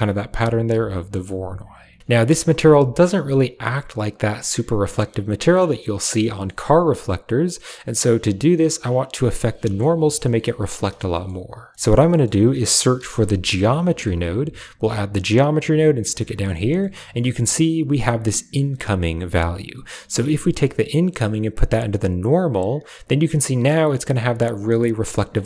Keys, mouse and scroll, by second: 1.0 middle click, 2.3 KP_Decimal, 3.3-6.4 middle drag, 7.8-9.7 middle drag, 10.5 middle click, 11.0 middle click, 12.0 click, 12.0 right click, 12.2 shift+a, 16.6 typing, 16.7 middle drag, 19.7 click, 19.9 typing, 20.8-22.4 drag, 22.7 click, 23.4-25.2 middle drag.